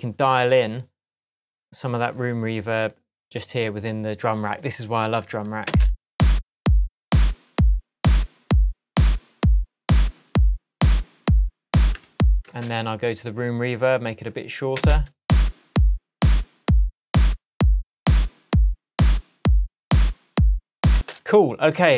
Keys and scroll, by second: 5.6 space, 11.9 Tab, 14.7 space, 20.9 space.